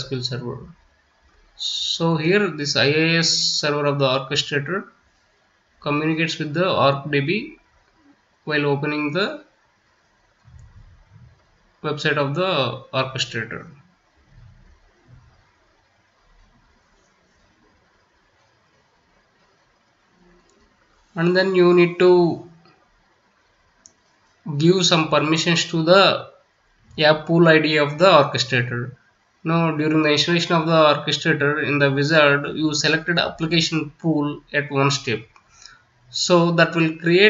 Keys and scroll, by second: 21.0 ctrl+v.